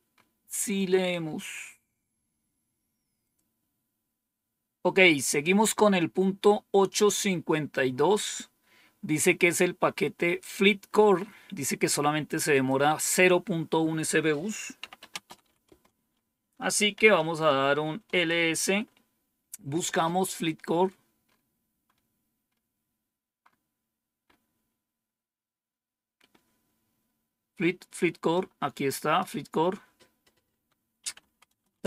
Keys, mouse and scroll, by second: 0.0-1.5 scroll down 7, 2.1 scroll down 1, 3.1 click, 12.4 click, 14.4-18.0 typing, 23.3-24.4 scroll up 1, 24.4-25.3 scroll down 2, 28.2 click, 30.6-31.8 typing.